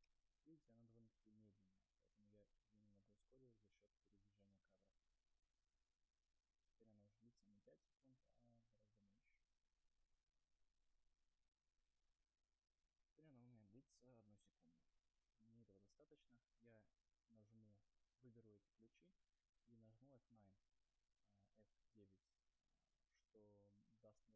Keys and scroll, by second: 4.8 0, 12.3 0, 20.2 F9.